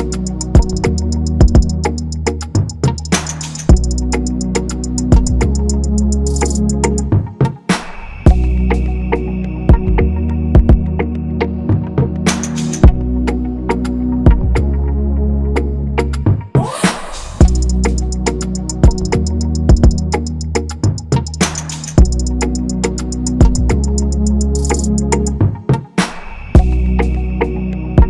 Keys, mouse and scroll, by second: 1.1-1.6 scroll, 2.0-2.5 scroll, 4.3-5.3 scroll, 5.1-5.8 typing, 10.1-10.7 scroll, 13.3-14.1 scroll, 14.3-14.8 scroll, 14.9-15.7 typing, 15.2-15.9 scroll, 16.2-16.6 scroll, 16.8-17.6 scroll, 20.4 typing, 20.9 ctrl+=, 21.0 ctrl+=, 21.4 scroll, 23.4-23.9 scroll up 1, 24.9 a.